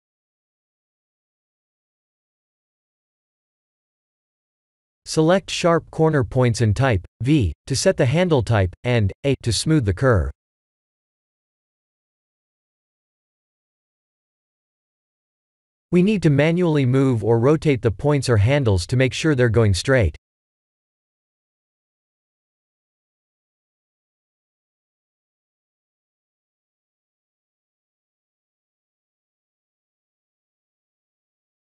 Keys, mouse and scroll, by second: 1.8-2.4 alt+shift+middle drag, 3.9-4.3 alt+shift+middle drag, 5.2-5.6 alt+shift+middle drag, 5.9 Tab, 7.7 click, 8.8 v, 10.7 Tab, 12.0 Tab, 12.5 drag, 12.9 v, 13.4 Tab, 14.4 Tab, 15.5 click, 17.0 g, 20.0 click, 20.2 Tab, 22.7 Tab, 24.2 shift+drag, 24.8 shift+click, 25.5 v, 26.2 Tab, 26.8 Tab, 27.8 click, 30.0 click, 30.4 r.